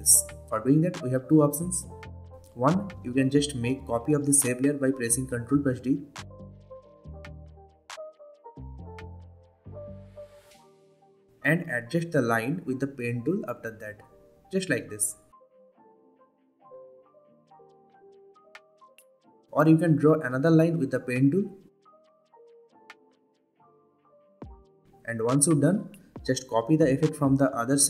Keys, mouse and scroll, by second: 8.0 ctrl+d, 9.8-10.4 click, 12.8-13.4 click, 14.3 click, 14.5 click, 14.8-15.5 ctrl+z, 15.8-16.1 click, 16.6 click, 16.8 v, 17.0-17.4 click, 17.8-18.2 click, 18.3 v, 18.4 click, 18.5 ctrl+z, 18.5 click, 18.9 r, 19.0 click, 19.5-23.9 drag, 26.5 v, 26.6 click.